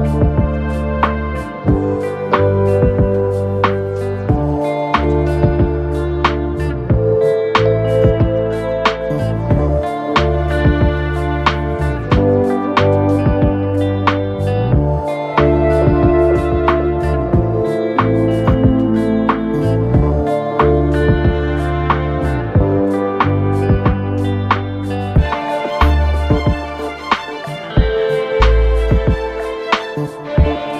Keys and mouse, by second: 1.5 alt+x, 3.3-6.2 drag, 6.9 alt+middle drag, 7.3 w, 7.7 click, 8.5 middle click, 9.0 click, 9.8 1, 10.9 alt+x, 11.2 click, 12.1 alt+click, 12.7 r, 13.5-14.7 drag, 14.9 alt+click, 15.9 click, 16.2 alt+click, 17.1 click, 17.3-18.4 drag, 18.6-19.7 alt+drag, 20.2 3, 20.8 click, 21.5 ctrl+z, 21.8 3, 22.3 Delete, 24.3 ctrl+z, 25.3-26.4 right drag, 26.5 alt+middle click, 26.8 alt+click, 27.2 right click, 27.9 F1, 28.3 middle click, 28.9 w, 29.2 click, 30.1 r, 30.5 click.